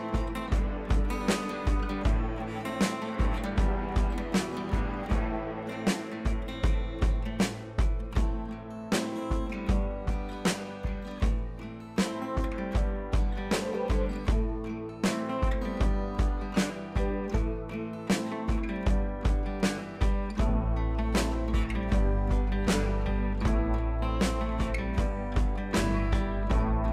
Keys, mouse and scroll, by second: 0.1 click, 4.5-8.1 drag, 9.0 scroll down 1, 9.2 scroll up 1, 10.7-14.8 drag, 17.6 ctrl+t, 17.9-19.4 drag, 21.7 click.